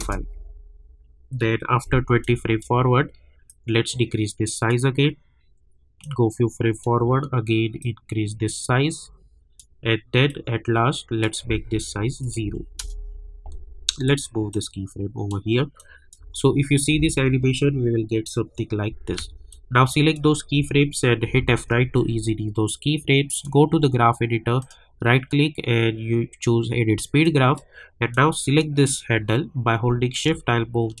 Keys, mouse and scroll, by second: 0.0 Return, 2.2-12.2 drag, 12.8 Return, 14.5-16.2 drag, 16.2 space, 19.1 space, 19.5 click, 21.2 F9, 23.3 click, 24.6 right click, 27.2-31.0 drag.